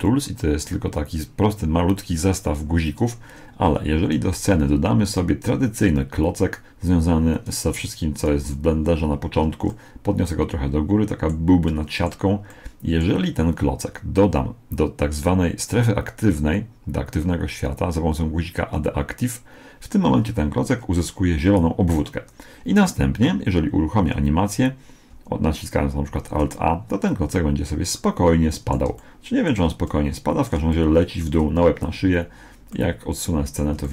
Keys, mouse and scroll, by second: 4.1 shift+a, 7.3-9.3 drag, 9.7-11.4 middle drag, 11.7-14.3 middle drag, 17.5-19.3 drag, 26.1 alt+a, 27.9-32.3 middle drag, 32.5-32.9 scroll down 1, 32.9-33.9 middle drag.